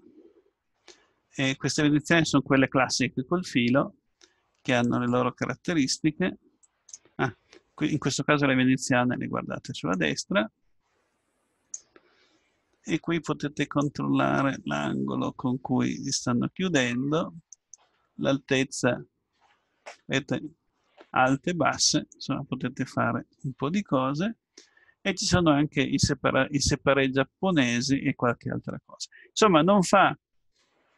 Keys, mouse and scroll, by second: 0.2-2.8 middle drag, 6.6-8.4 drag, 9.9-13.7 drag, 13.8-15.2 right drag, 15.2-22.8 drag.